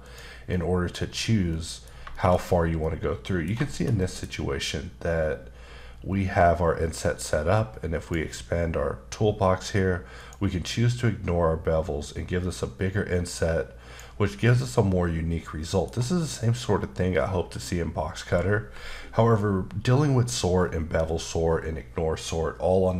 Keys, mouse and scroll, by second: 0.0 click, 0.5 middle click, 1.0 scroll up 2, 1.5 middle click, 2.1 shift+middle click, 2.3 middle click, 2.4-2.8 scroll up 2, 2.8 middle click, 3.7 shift+middle click, 4.4-5.1 scroll up 1, 8.0 click, 10.2 click, 12.0 click, 14.4 middle click.